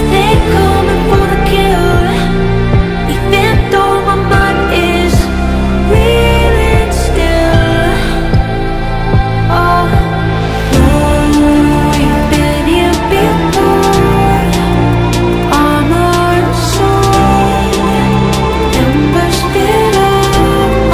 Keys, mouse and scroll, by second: 0.7 ctrl+t, 1.9 click, 2.3-2.7 scroll down 1, 2.7 click, 5.4 alt+Num_Lock, 5.4 alt+scroll down 1, 6.4 click, 7.0-8.6 typing, 9.8 click, 10.3 v, 10.8-15.9 drag, 17.4 ctrl+t, 18.2-20.9 drag.